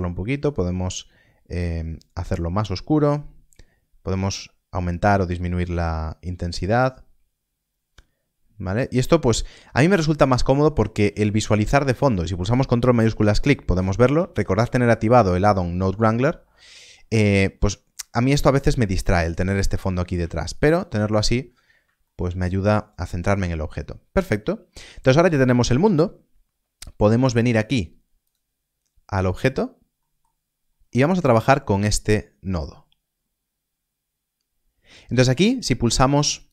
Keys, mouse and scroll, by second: 8.7 middle click, 9.0 scroll down 1, 11.3 scroll, 12.9 ctrl+shift+click, 20.5 ctrl+shift+click, 21.3-21.7 scroll up 1, 22.0 shift+middle click, 28.2 click, 29.9 middle click, 30.3 scroll down 1, 31.1 middle click, 31.6 scroll up 1, 36.3 click.